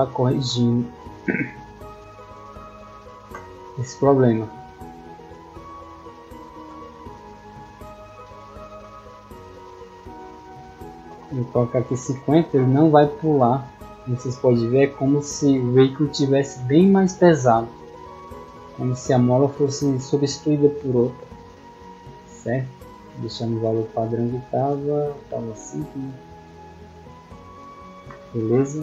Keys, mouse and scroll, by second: 2.2 click, 13.5-14.2 drag, 14.4 middle click, 28.3-28.8 scroll down 2.